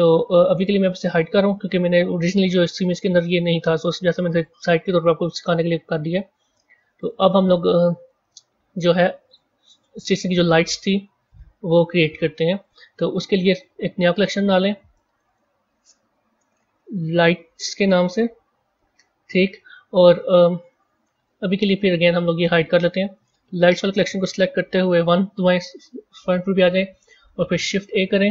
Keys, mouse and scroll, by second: 6.0 click, 6.9 click, 8.8 click, 9.2 click, 9.9 scroll up 4, 12.6 scroll up 4, 14.0-14.9 right drag, 14.9 click, 15.2-18.3 drag, 20.6-22.0 middle drag, 22.0 click, 22.4 click, 23.5 click, 24.3 KP_1, 27.6 shift+a.